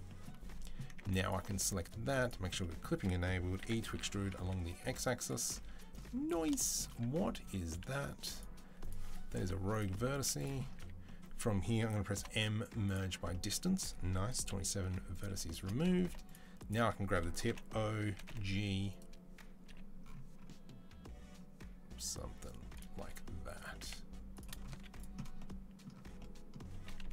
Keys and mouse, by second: 1.1 middle click, 2.0 click, 2.4-8.6 middle drag, 3.4 e, 7.2 1, 7.6 z, 8.6 click, 8.7-12.0 middle drag, 9.2 Delete, 10.0 z, 10.6 a, 12.0 m, 14.3 KP_3, 14.6 z, 15.8 1, 17.3 o, 17.9 g, 19.5 g, 20.3-27.1 middle drag, 22.8 r, 23.6 g, 24.5 z, 26.8 KP_3.